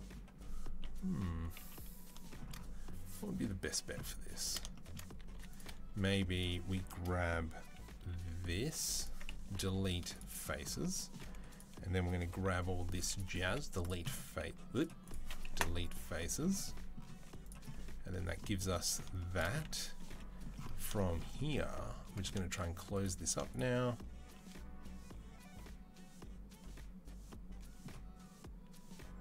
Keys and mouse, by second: 0.7 KP_3, 1.1 KP_1, 1.4 KP_3, 5.1 3, 5.3 click, 5.4-10.6 middle drag, 5.9 z, 7.8 b, 9.3 Delete, 10.6 shift+click, 10.9-22.7 middle drag, 12.3 c, 13.3 Delete, 14.1 z, 15.3 Delete, 16.9 z, 19.9 2, 22.7 click, 22.9-29.2 middle drag.